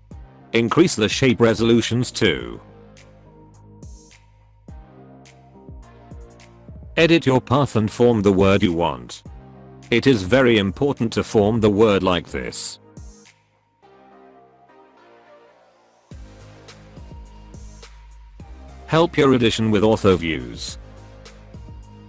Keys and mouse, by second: 0.2-1.5 drag, 1.6-2.8 drag, 3.3 Tab, 3.9 alt+middle click, 4.1 alt+middle click, 4.7 shift+middle click, 5.5 click, 6.9 x, 8.1 click, 8.7 g, 10.2 e, 12.3 e, 13.9 e, 18.2 alt+middle click, 19.7 shift+middle click, 20.7 shift+middle click, 21.6 g.